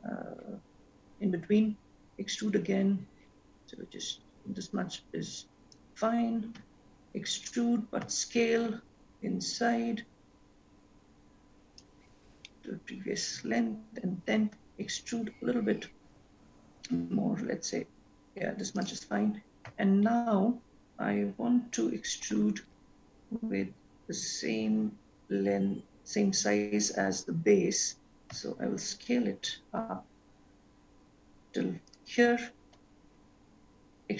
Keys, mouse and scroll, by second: 2.1 e, 6.6 e, 12.8 shift+middle click, 14.7 e, 19.8 e, 32.8 e.